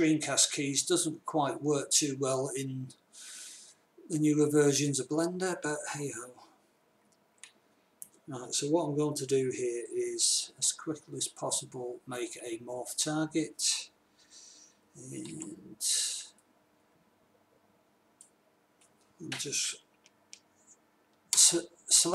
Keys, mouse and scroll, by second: 7.6 a, 11.0 b, 15.7 b, 19.1 click, 21.8 ctrl+KP_Add.